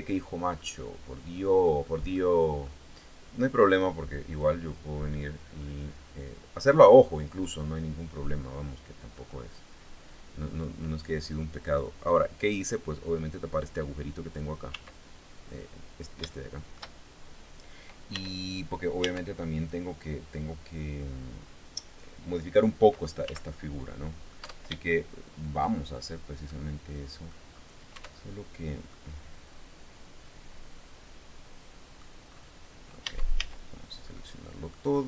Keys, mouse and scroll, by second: 0.1-1.4 middle drag, 1.7 middle click, 3.3 click, 3.9-6.9 drag, 7.1-8.9 middle drag, 8.9-9.9 scroll up 2, 9.1 middle click, 11.4-14.1 drag, 14.3 s, 15.0 click, 15.9 shift+middle click, 17.7 Tab, 18.6 Tab, 19.1 right click, 22.8 z, 23.5 middle click, 24.0 Tab, 24.5 shift+click, 26.0 click, 27.0-27.3 scroll down 1, 27.5 Tab, 28.5-31.7 drag, 31.9-32.3 scroll up 1, 32.6 Tab, 32.9 a, 33.7 middle click, 34.5-35.0 scroll down 1.